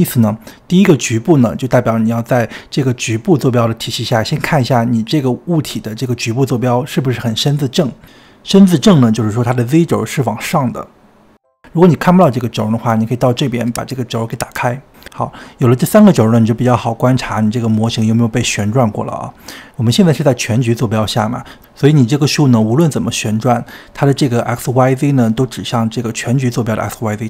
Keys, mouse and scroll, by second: 4.3-7.1 drag, 7.5 r, 13.8-24.0 drag, 24.3 r, 26.5 ctrl+z.